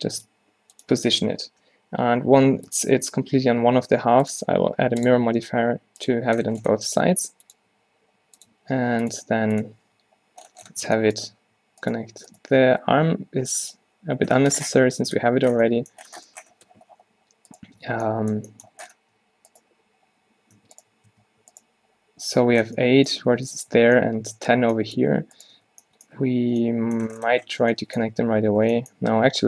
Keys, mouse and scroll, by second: 0.0-1.5 typing, 6.9 r, 7.8 r, 8.6 s, 9.2 g, 9.9 Tab, 10.9 Tab, 12.7 x, 14.3 Tab, 17.9 Tab, 20.7 Tab, 20.9 click, 21.2 Tab, 23.4 Tab, 23.9 Tab, 25.2 Tab, 25.6 Tab, 26.5 Tab, 28.6 Tab, 29.0-29.4 typing.